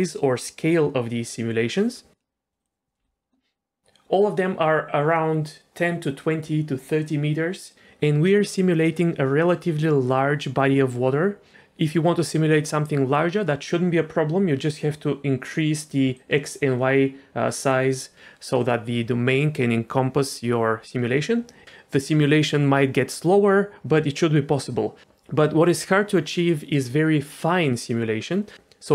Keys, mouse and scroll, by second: 2.6 click, 2.9 n, 14.6-15.7 drag, 16.1-17.5 drag.